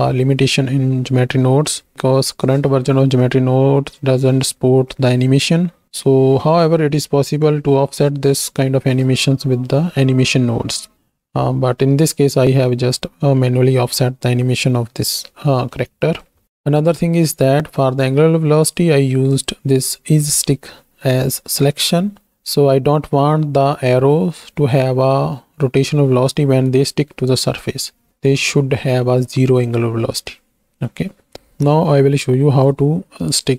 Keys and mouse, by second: 1.3 click, 7.3 click, 8.4 click, 14.0-15.1 drag, 15.7 click, 19.3 click.